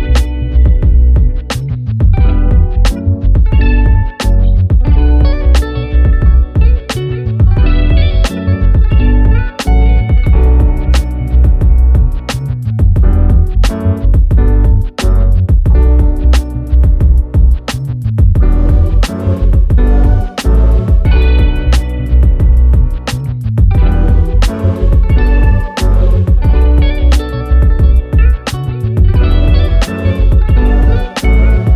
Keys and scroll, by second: 5.1 ctrl+v, 17.8 ctrl+z, 28.4 ctrl+a.